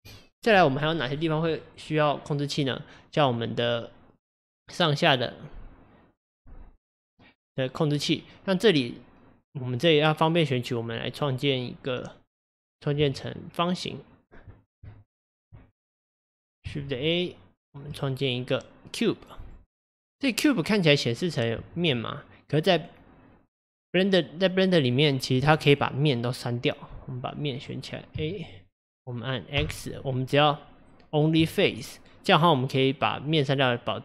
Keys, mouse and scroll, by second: 3.3 click, 7.1 click, 8.0 click, 12.6 click, 13.1 Tab, 14.9 Tab, 16.1 click, 16.9 shift+a, 21.7 Tab, 27.7 click, 28.3 a, 29.6 x, 32.4-33.5 scroll down 2.